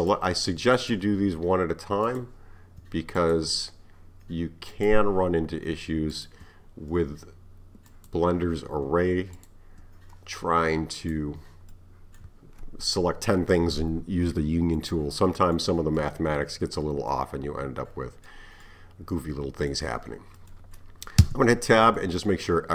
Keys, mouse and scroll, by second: 0.0 click, 0.8 shift+click, 2.1-3.3 drag, 4.7 click, 6.2 shift+click, 7.9 click, 9.4 shift+click, 11.0 click, 11.7-14.7 middle drag, 14.8-21.3 middle drag, 21.3 Tab, 22.0-22.7 middle drag.